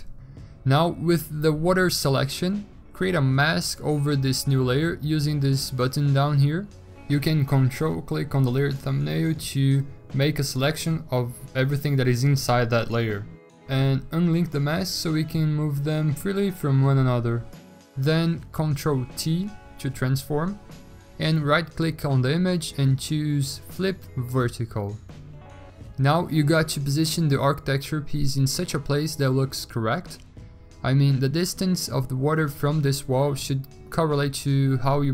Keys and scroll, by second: 19.4 ctrl+t.